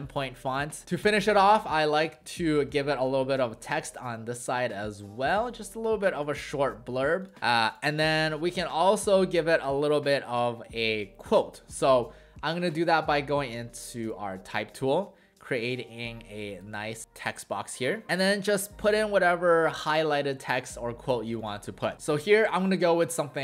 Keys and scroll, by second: 0.5 w, 7.4 w, 17.0 w.